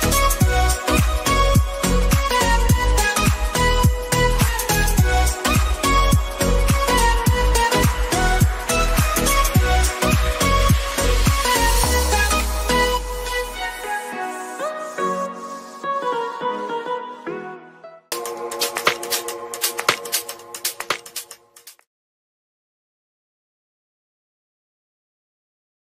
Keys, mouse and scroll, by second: 2.2 click, 3.3 Down, 5.0 ctrl+s, 6.3 ctrl+s, 7.3 click, 8.6 click, 8.7 space.